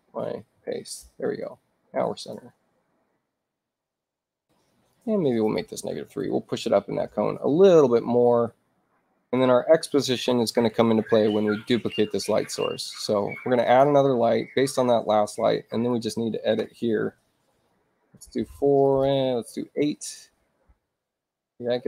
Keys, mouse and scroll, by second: 0.5 ctrl+v, 1.4 click, 2.3-4.0 drag, 4.9 click, 6.6 Tab, 9.3 click, 13.6 click, 15.8 click, 17.5 4, 17.7 Tab, 18.8 click, 20.1 click, 20.4 8, 20.8 Tab.